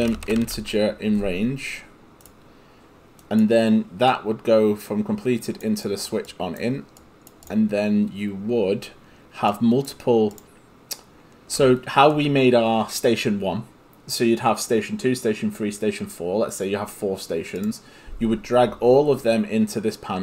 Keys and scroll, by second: 0.0-1.1 typing.